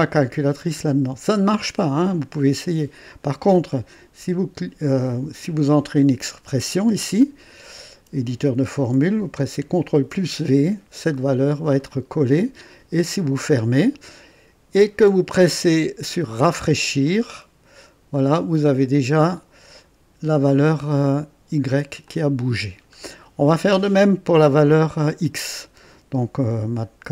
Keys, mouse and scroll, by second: 5.5 click, 9.8 ctrl+v, 11.7 click, 17.0 click, 18.1-20.2 drag, 22.0-23.6 drag.